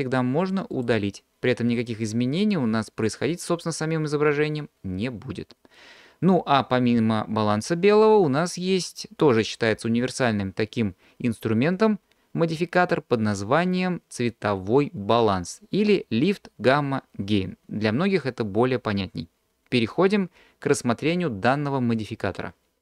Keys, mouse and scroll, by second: 0.7 click, 8.4-22.8 drag.